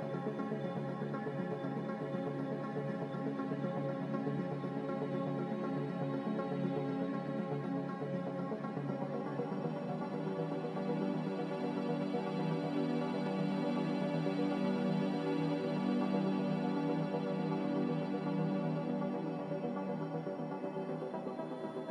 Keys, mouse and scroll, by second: 19.4-21.9 typing.